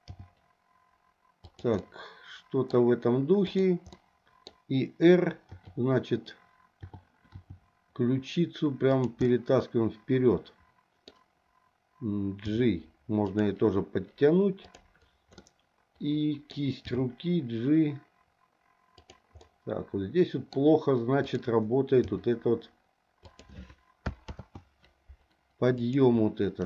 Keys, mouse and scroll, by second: 0.1 g, 1.8 middle click, 3.4 click, 3.9 middle click, 5.5 t, 6.8 t, 7.3 r, 9.3-11.1 middle drag, 12.5 g, 14.6 click, 15.4-16.5 middle drag, 16.8 g, 19.4-20.5 middle drag, 20.5 scroll down 1, 21.2 click, 22.1 g, 24.3 ctrl+z, 25.8 click.